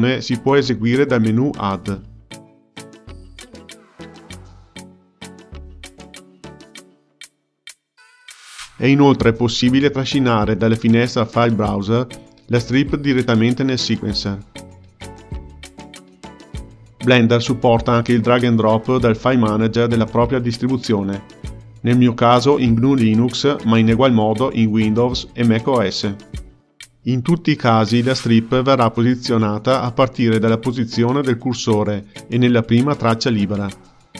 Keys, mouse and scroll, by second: 1.6-4.7 drag, 8.9 ctrl+z, 12.3-14.2 drag, 26.8 x, 28.8-30.1 drag, 31.5-33.7 drag.